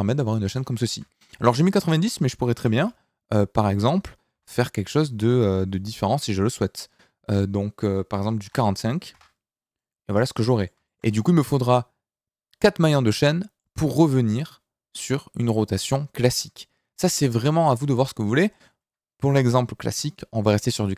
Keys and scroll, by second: 2.5 r, 2.8 y, 4.3 x, 8.4 KP_4, 8.5 KP_5, 9.1 KP_Enter, 17.9 ctrl+z.